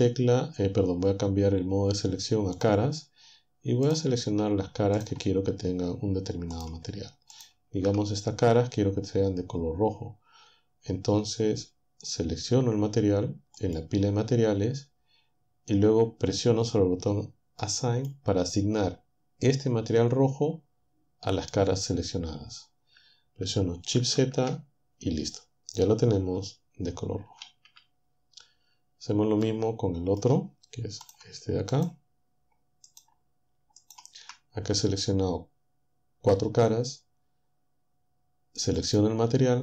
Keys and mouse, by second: 2.5-3.9 drag, 3.9 right click, 5.0-6.8 shift+right drag, 7.3 shift+right click, 13.5 click, 17.6-18.8 drag, 24.0 shift+z, 27.4 shift+z, 31.0 click, 31.7 shift+click, 32.9-34.1 shift+drag, 38.8 click.